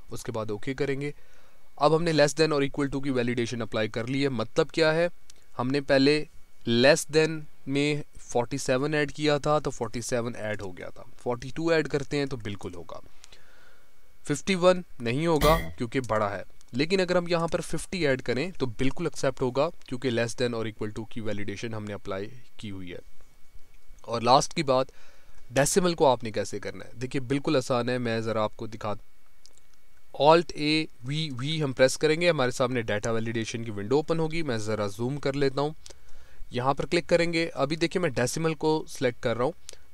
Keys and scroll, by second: 30.6 alt+a, 31.0 alt+v.